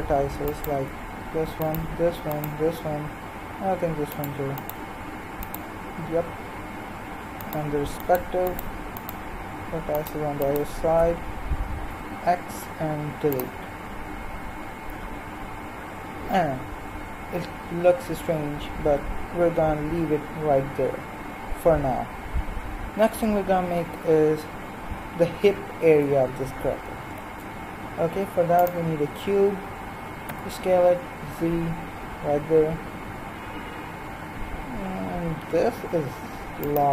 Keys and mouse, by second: 11.9 x, 27.3 shift+a, 30.2 s.